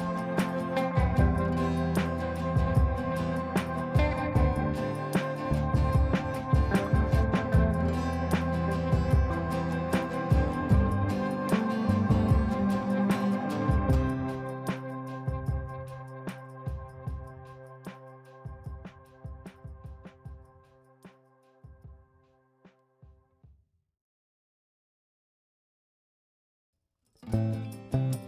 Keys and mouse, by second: 4.3-11.2 drag, 22.3-28.2 drag, 26.1-27.0 click, 28.1-28.2 drag.